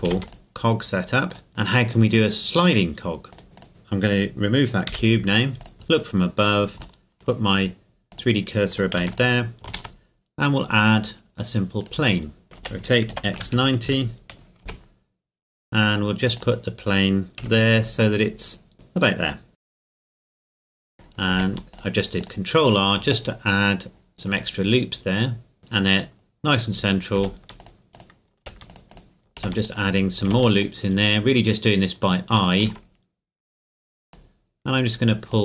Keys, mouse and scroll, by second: 0.1 ctrl+s, 0.3 click, 1.5 middle click, 3.3 click, 3.4 scroll down 1, 3.6 click, 3.7 scroll up 1, 4.8 Delete, 5.6 click, 5.7 KP_7, 6.4 click, 7.0-8.1 shift+middle drag, 8.1 click, 8.9 ctrl+s, 9.1 click, 9.7 shift+a, 11.8 click, 12.6 r, 13.1 x, 13.3 KP_9, 13.4 KP_0, 13.8 KP_Enter, 14.3-14.6 scroll up 2, 14.6 g, 16.4 click, 16.8-17.4 scroll up 1, 17.4 KP_7, 18.0 scroll up 1, 18.7 click, 19.5 KP_1, 19.8 Tab, 20.2 ctrl+r, 20.2 click, 20.7 ctrl+r, 20.8 click, 21.3 ctrl+r, 21.7 click, 25.6 click, 27.2 ctrl+r, 27.6 click, 28.4 ctrl+r, 28.7 click, 29.4 ctrl+r, 29.6 click, 30.3 ctrl+r, 30.4 ctrl+click, 32.3 right click, 34.1 click.